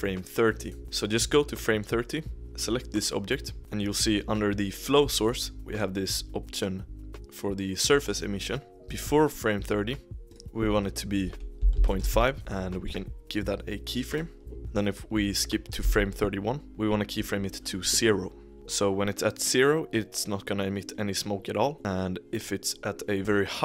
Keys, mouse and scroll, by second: 3.8-7.8 drag, 10.2-12.4 drag, 12.8-14.9 right drag, 15.8 Right, 16.7-17.5 right drag.